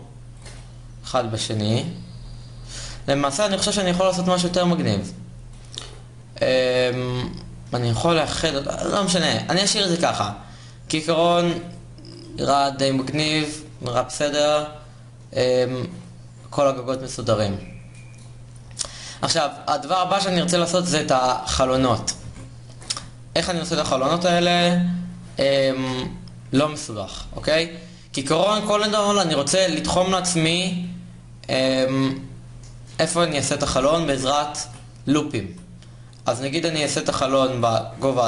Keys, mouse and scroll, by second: 2.9-7.0 middle drag, 8.3-12.0 drag, 8.6 Tab, 12.0 g, 12.7 Tab, 14.9 middle click, 22.7 Tab, 32.2 middle click, 33.2 KP_1, 34.2 a, 35.0 ctrl+r.